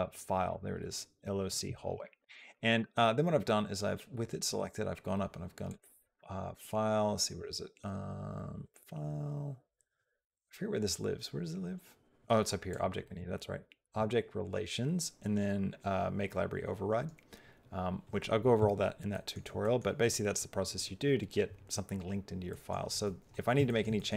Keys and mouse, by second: 1.8 shift+middle click, 2.1 middle click, 2.6 middle click, 5.5 click, 12.6 click, 18.9 middle click, 22.3 middle click, 23.5 shift+middle click, 23.8 middle click.